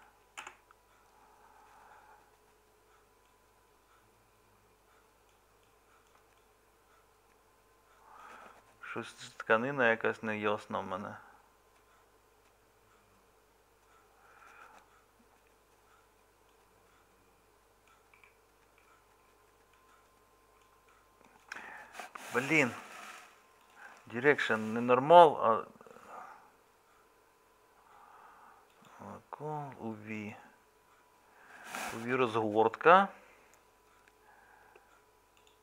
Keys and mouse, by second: 6.1-20.7 middle drag, 21.4-35.6 middle drag.